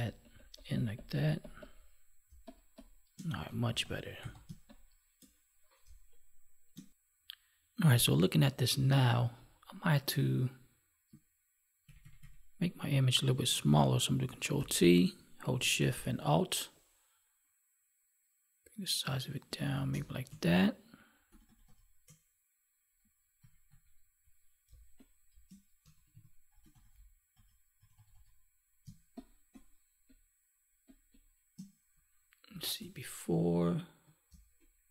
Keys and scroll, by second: 2.2 space, 3.6 ctrl+s, 4.4 space, 11.8 ctrl+-, 14.5 ctrl+t, 23.3 ctrl+=, 24.6 space, 28.7 space, 34.2 space.